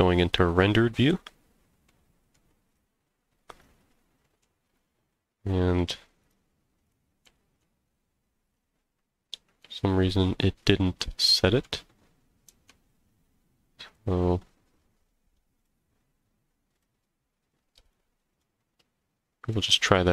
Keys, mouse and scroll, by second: 1.8-2.3 middle drag, 2.6 click, 2.9-3.4 scroll up 3, 3.5 click, 4.2 middle click, 4.6 click, 5.0 scroll down 2, 6.2 click, 6.8 click, 7.2 z, 8.0 scroll down 1, 8.5 click, 9.6 z, 12.5 z, 13.9 click, 15.6 click, 16.7 click, 17.8 shift+click, 18.3 shift+click, 20.0 click.